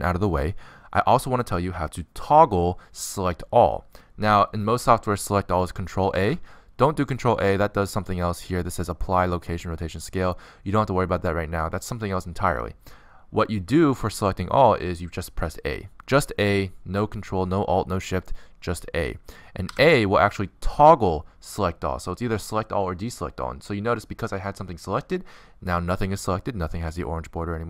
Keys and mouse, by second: 7.8 ctrl+a, 20.2 a, 25.0-27.6 middle drag.